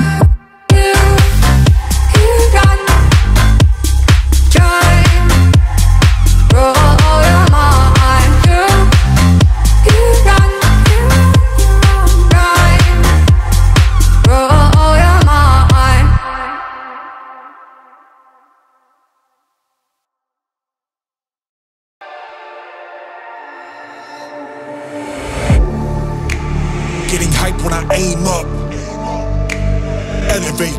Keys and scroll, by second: 1.4 ctrl+-, 1.8 ctrl+-, 6.7 ctrl+-, 11.7 ctrl+=, 12.0 ctrl+=, 17.4-19.0 typing, 20.0 typing, 21.1 [, 24.6 [, 26.0 ], 27.1-28.4 typing.